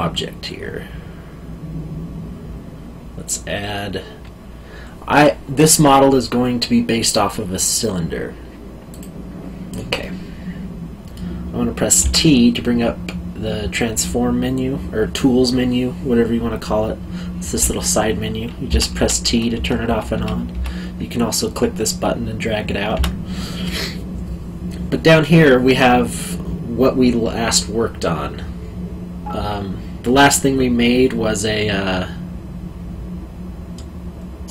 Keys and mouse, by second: 8.9 click, 10.0 middle click, 12.0 t, 18.6 t, 22.9 t.